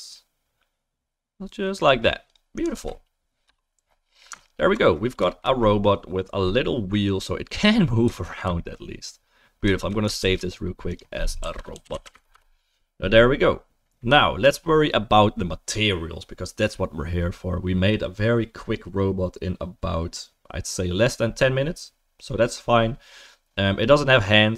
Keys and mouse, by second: 2.8 ctrl+s, 3.5-5.2 right drag, 4.4 alt+middle click, 5.2-8.5 middle drag, 8.5-9.7 alt+right drag, 9.7-10.2 shift+middle drag, 10.2 ctrl+s, 10.2 ctrl+click, 12.3 ctrl+s, 12.3-14.2 drag, 14.2-21.5 shift+middle drag, 21.5-24.5 right drag.